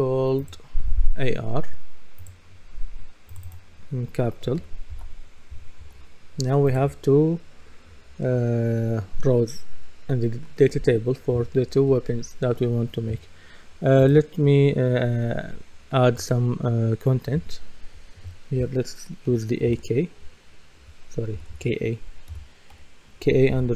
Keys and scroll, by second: 4.9 shift+r, 5.8 Return, 19.3-19.7 typing, 21.4-22.7 typing.